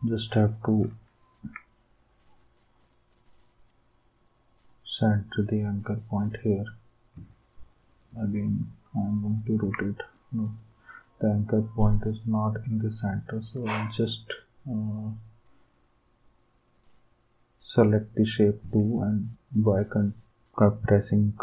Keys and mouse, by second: 0.7 ctrl+click, 7.3 ctrl+click.